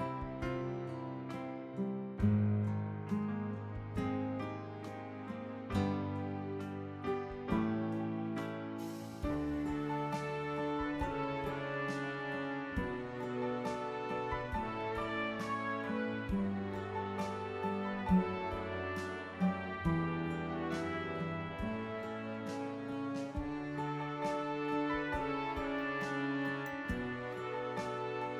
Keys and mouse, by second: 0.7 click, 3.7 click, 6.3 click, 7.7 click, 12.9 click, 14.1 click, 15.4 click, 16.7 click, 18.0 click, 20.0 click, 23.6 click, 27.3 click.